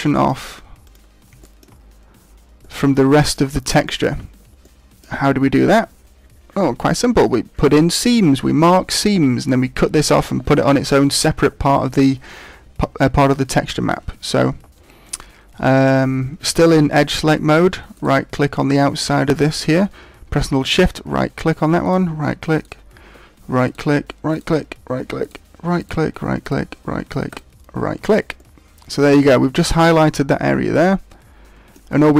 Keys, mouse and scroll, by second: 0.1 click, 1.4 shift+middle click, 1.6-2.5 scroll down 6, 2.5 middle click, 3.4 scroll up 3, 3.8 shift+middle click, 4.6 middle click, 17.9 right click, 20.7 shift+right click, 21.8 shift+right click, 22.5 shift+right click, 23.6 shift+right click, 24.3 shift+right click, 25.2 shift+right click, 25.7 shift+right click, 26.4 shift+right click, 28.3 shift+right click, 28.3 middle click.